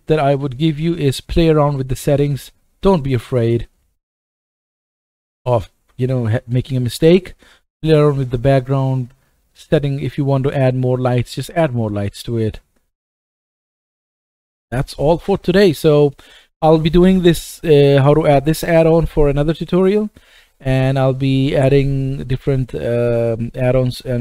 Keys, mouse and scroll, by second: 0.0 click, 9.4 click, 10.2 click, 11.2 click, 12.9 click.